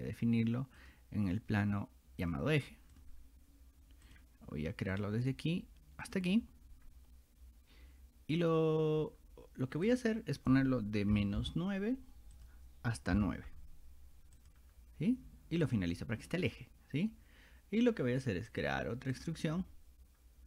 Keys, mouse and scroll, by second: 0.8 click, 2.2 click, 3.0 click, 4.1 click, 4.9 click, 6.1 click, 9.9 click, 12.4 click, 14.4 click, 15.7 click, 18.5 click, 19.2 click.